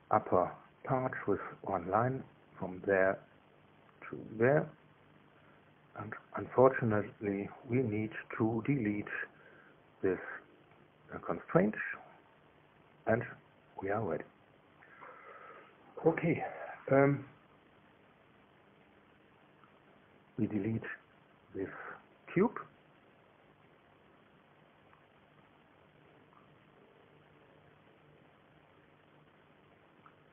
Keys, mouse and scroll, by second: 0.8 click, 3.6 click, 6.3 click, 9.4 right click, 10.3 click, 11.4 Delete, 13.4 scroll down 1, 13.9 scroll up 1, 15.0 click, 15.7 middle click, 18.2 click, 19.1 click, 24.4 click, 25.6 click, 27.2 Delete, 28.4 click, 29.9 click.